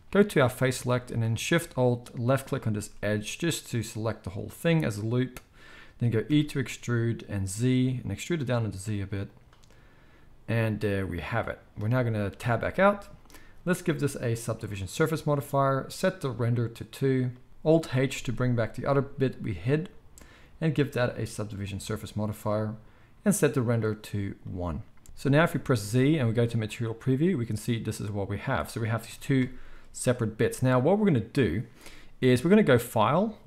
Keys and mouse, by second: 0.2-2.4 drag, 2.4-13.6 alt+shift+middle drag, 6.2 e, 12.3 Tab, 13.6-19.5 drag, 17.5 ctrl+h, 18.1 ctrl+h, 19.5-20.8 middle drag, 20.8-25.0 drag, 25.0 ctrl+s, 25.0 Tab, 25.0 alt+a, 25.0-28.5 middle drag, 25.0 z, 25.8 z, 28.5 click, 28.7-32.8 middle drag, 29.0 g, 32.8-33.4 drag.